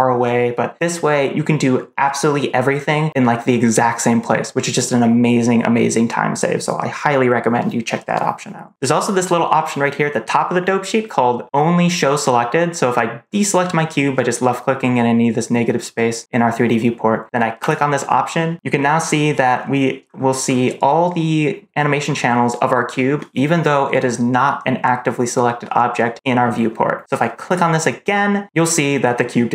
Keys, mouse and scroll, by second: 13.3 click, 17.5 click, 18.9-19.4 scroll down 3, 19.4-19.9 scroll up 3, 19.9-20.3 scroll down 2, 20.3-21.1 scroll up 3, 21.9-22.5 scroll down 1, 22.5-23.1 scroll up 1, 27.4 click.